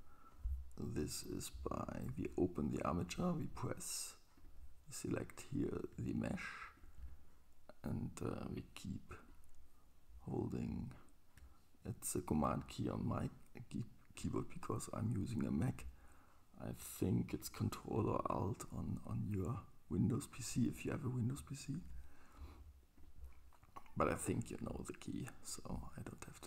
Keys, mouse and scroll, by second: 3.1 click, 6.7 super+click, 9.1 click, 14.1 super+click, 24.4 super+middle click, 24.4-26.4 super+right drag.